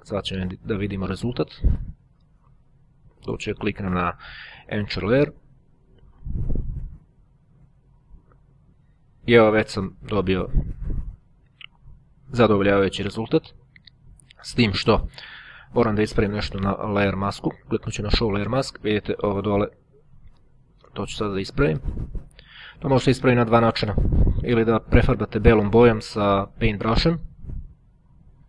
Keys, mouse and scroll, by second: 3.0 right click, 5.2 click, 7.5-9.2 drag, 13.2 click, 14.8 right click, 17.7 click, 24.7 click, 27.3 click.